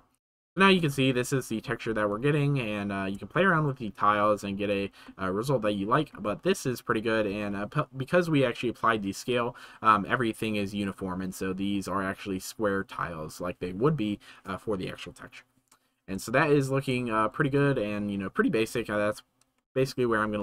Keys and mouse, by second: 0.5 shift+middle click, 3.3 shift+middle click, 5.1-5.6 shift+middle drag, 6.5 shift+middle click, 16.4 shift+middle click, 19.7 shift+middle click.